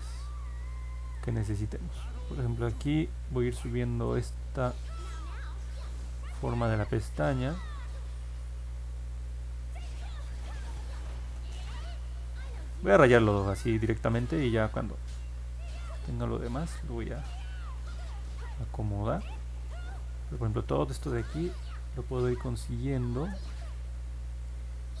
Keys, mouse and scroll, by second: 1.4 click, 2.2 click, 3.1 click, 3.8 click, 4.6 click, 5.1 click, 5.6 click, 6.3 click, 7.0 click, 10.8 ctrl+z, 11.2 ctrl+z, 11.6 ctrl+z, 13.1-15.9 drag, 17.4-20.5 drag, 23.9 click.